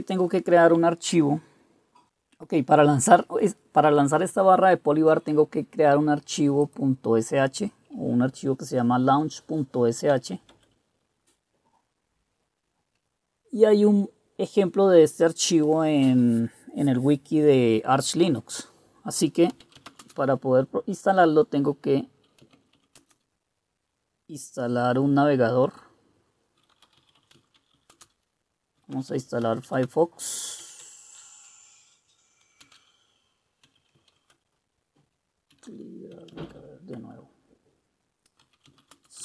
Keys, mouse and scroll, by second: 10.2-10.9 typing, 19.4-20.5 typing, 22.3-23.4 typing, 26.7-37.1 typing, 37.1 Return, 38.3-39.2 typing.